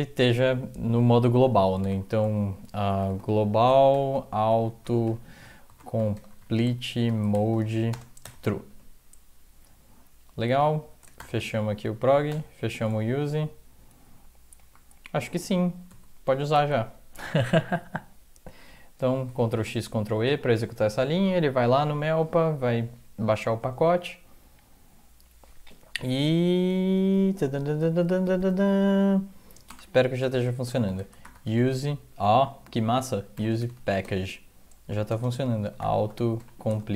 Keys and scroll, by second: 1.9-8.2 typing, 2.5 Left, 8.7 End, 11.2-12.3 typing, 13.3 Left, 14.6 Right, 14.6 typing, 15.9 ctrl+x, 15.9-17.0 typing, 29.7 Return, 30.2 Return, 30.9-31.6 typing, 33.3-36.4 typing, 34.0 Tab, 36.7 Tab.